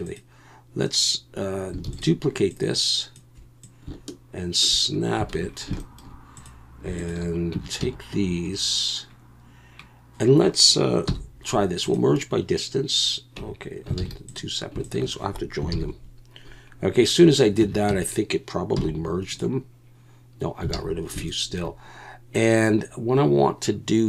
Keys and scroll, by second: 1.8 shift+d, 5.3 alt+a, 7.5 Tab, 7.8 a, 11.1 m, 13.4 Tab, 14.0 alt+a, 15.7 ctrl+j, 17.6 Tab, 17.9 a, 18.7 m, 20.7 alt+a.